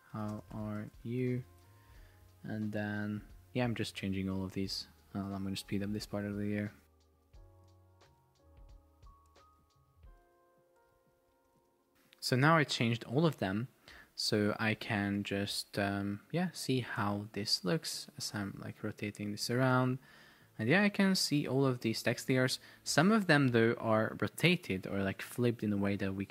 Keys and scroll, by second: 0.0-1.8 typing, 7.0-12.1 typing, 15.1 Return, 17.5 shift+Up, 20.0 shift+Up, 22.3 shift+Down.